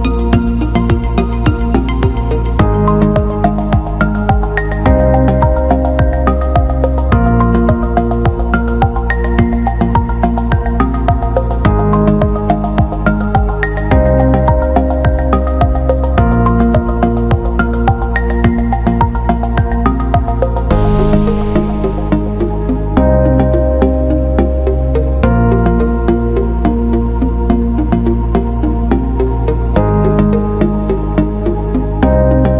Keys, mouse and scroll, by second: 0.0 click, 0.6-1.2 alt+middle drag, 1.6-2.0 alt+middle drag, 2.1 alt+shift+middle drag, 2.4 alt+middle drag, 4.9 click, 5.2-6.0 alt+middle drag, 6.2 alt+shift+middle drag, 6.8-7.9 alt+shift+middle drag, 8.4 alt+shift+middle drag, 9.4 alt+middle click, 10.5 click, 14.5 click, 15.7-19.8 drag, 19.9 alt+middle click, 23.8 click, 28.7-29.1 alt+middle drag, 29.3 alt+shift+middle drag, 31.1 click, 32.2 alt+middle click.